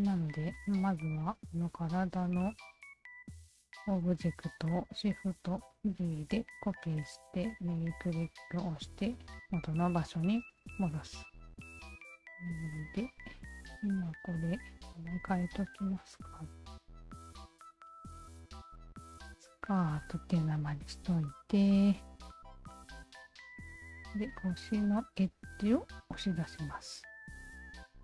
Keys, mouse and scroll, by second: 0.9 alt+click, 3.7 alt+click, 5.6 shift+d, 7.8 right click, 11.3 alt+click, 11.9 click, 12.7 alt+click, 13.1 alt+click, 13.5 alt+click, 14.2 alt+click, 14.3 alt+click, 15.8-17.9 typing, 17.9 Return, 21.1 Tab, 22.4 click, 23.1 click, 23.7 alt+right click, 24.7 alt+right click, 25.8 2, 26.3 alt+click, 27.6 alt+click, 27.8 alt+click.